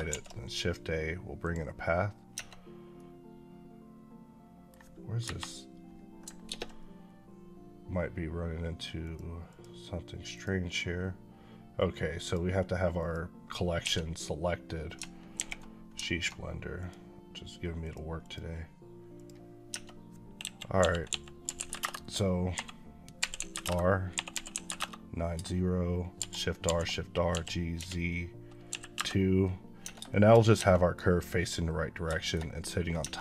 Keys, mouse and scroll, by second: 1.3 click, 2.2 Tab, 2.8 middle click, 5.1 KP_Divide, 6.3 ctrl+space, 8.9 click, 13.7 1, 15.2 alt+h, 16.6 click, 19.5 Tab, 20.3 KP_1, 20.6 KP_5, 21.3 r, 21.4 KP_9, 21.6 KP_Enter, 23.0 r, 23.5 KP_Enter, 24.2 r, 24.4 KP_9, 24.6 KP_Enter, 26.0 shift+r, 27.1 g, 28.8 KP_Enter, 29.7 Tab, 29.9 shift+middle click, 30.0 shift+scroll up 2, 30.4 Tab, 30.5 middle click, 31.7 scroll down 1, 32.1 shift+middle click, 32.8 Tab.